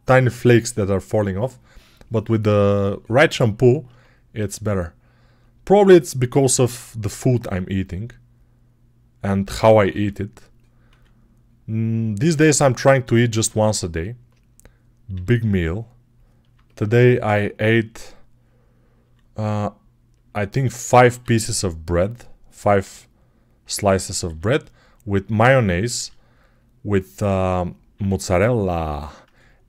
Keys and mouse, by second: 4.2 e, 5.6 r, 7.1-8.7 middle drag, 7.2 e, 9.7 r, 10.7 s, 11.8-14.2 middle drag, 12.1 g, 14.2 click, 14.5-17.3 middle drag, 15.0 g, 17.3 right click, 17.9-21.3 middle drag, 18.8 s, 20.9 e, 22.6 r, 24.1 e, 24.9-29.6 middle drag, 25.8 e, 27.8 r.